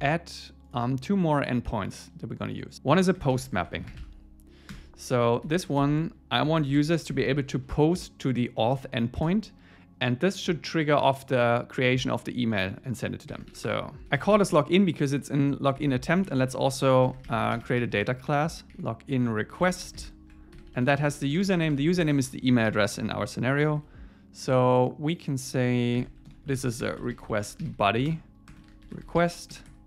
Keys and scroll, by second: 4.7 Return, 7.1 Escape, 8.6 Right, 9.3 Return, 15.8 ⟲, 16.1 Down, 16.7 Return, 23.6 ⟲, 26.3 alt+l, 28.1 Return.